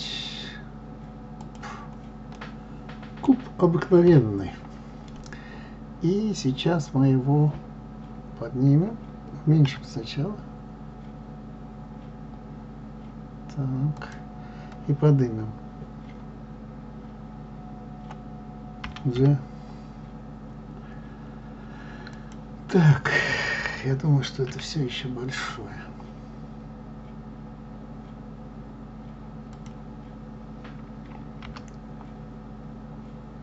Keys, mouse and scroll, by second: 1.3 shift+a, 2.3-4.0 middle drag, 4.0 KP_3, 9.7 s.